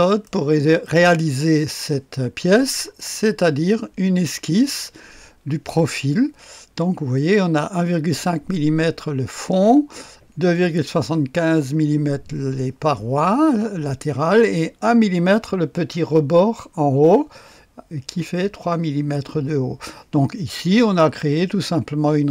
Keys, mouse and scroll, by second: 0.0-1.6 drag, 2.4-3.5 scroll up 1, 2.9-4.0 right drag, 20.7 click.